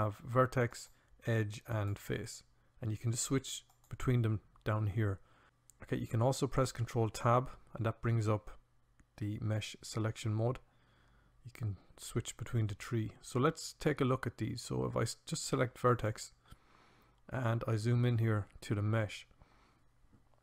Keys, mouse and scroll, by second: 0.4-4.2 drag, 4.2 ctrl+Tab, 6.9 ctrl+Tab.